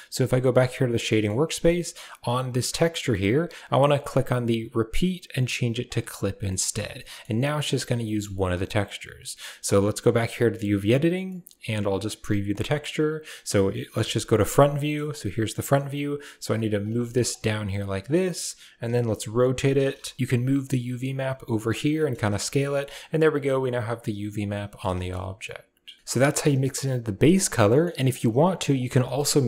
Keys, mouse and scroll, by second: 0.1 click, 0.9 middle click, 1.9 click, 3.8-5.8 drag, 6.3 middle drag, 6.8 middle drag, 7.9 middle click, 11.1-12.3 middle drag, 13.8 KP_1, 14.5 middle click, 15.0 middle click, 15.6 g, 16.7 g, 18.7 r, 20.2 g, 22.3 shift+middle click, 22.7 Tab, 23.1-24.6 middle drag, 24.8 shift+middle drag, 26.2 click, 26.5 g, 27.5 middle drag, 27.9 drag, 28.3 g, 28.7 a, 28.9 middle click.